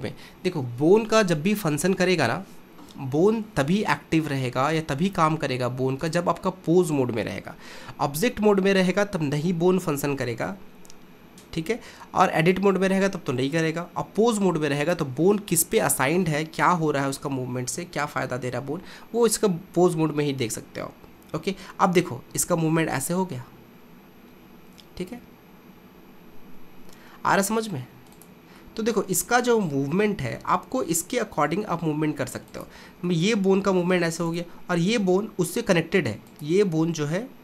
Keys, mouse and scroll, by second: 6.0-9.3 drag, 12.5-15.0 drag, 21.1 r, 28.6-30.5 middle drag, 30.5 r, 33.1-34.3 middle drag, 34.3 click, 35.2 r.